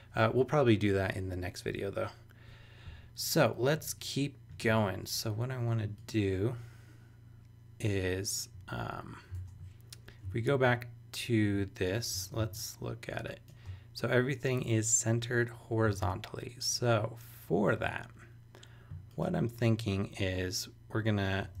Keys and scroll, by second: 11.8 super+=, 12.4 super+space, 16.0 super+Tab, 21.4 Down.